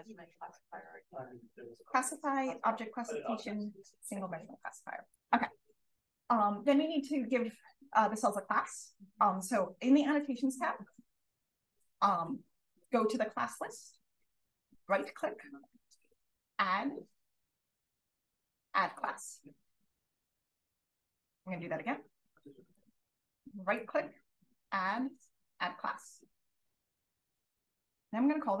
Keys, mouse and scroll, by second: 5.1 super+l, 10.0-15.0 drag, 15.0 right click, 18.8 click, 23.6 right click, 27.2 click, 28.4-28.6 typing.